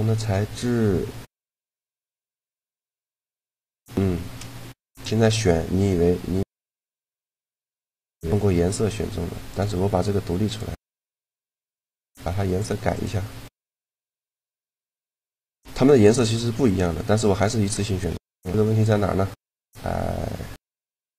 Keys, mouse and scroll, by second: 3.7 shift+g, 5.5 click, 7.1 middle click, 7.9-9.1 middle drag, 9.1-11.1 right drag, 10.2-14.4 drag, 13.9 right click, 14.4 shift+g, 16.3 g, 20.4-21.1 drag.